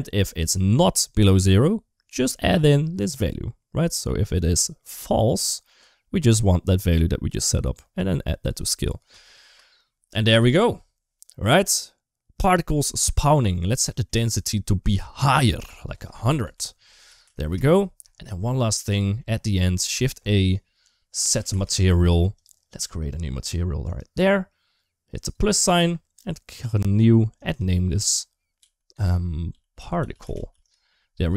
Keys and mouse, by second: 2.4-5.2 drag, 5.6-6.8 drag, 8.0 click, 9.3 space, 12.7 space, 13.3 middle click, 13.6 middle click, 14.6 middle click, 15.7-17.3 drag, 17.1 0, 18.6 middle click, 18.8 middle click, 19.6 shift+a, 23.8 click, 25.5 click, 26.7 click, 27.2-30.4 drag.